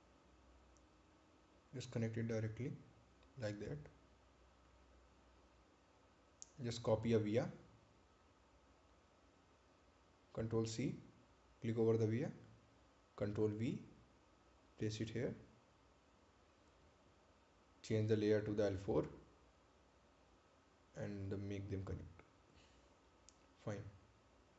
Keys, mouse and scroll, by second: 5.7 right click, 9.1 click, 11.5 click, 12.8 ctrl+c, 13.6 click, 15.3 ctrl+v, 17.7 click, 20.8 click.